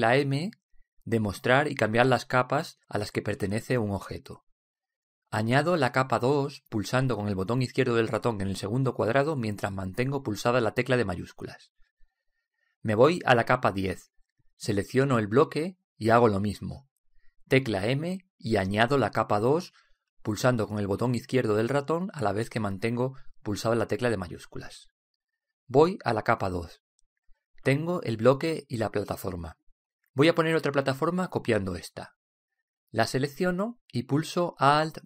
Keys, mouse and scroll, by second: 2.2 m, 15.6-17.5 drag, 17.5 right click, 19.2 m, 27.6-29.3 drag, 29.3 middle click, 31.5-33.8 drag, 34.1 right click.